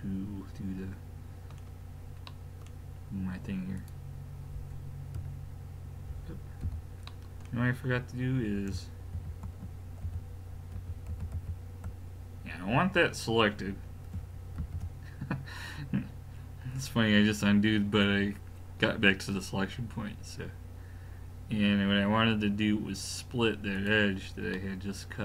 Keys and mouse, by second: 2.3-3.8 middle drag, 3.8 click, 5.2 l, 6.6 a, 7.1-8.8 middle drag, 9.2 ctrl+z, 10.2 ctrl+z, 10.8 ctrl+z, 11.1 ctrl+z, 11.4 ctrl+z, 14.6 ctrl+e, 24.5-25.2 middle drag.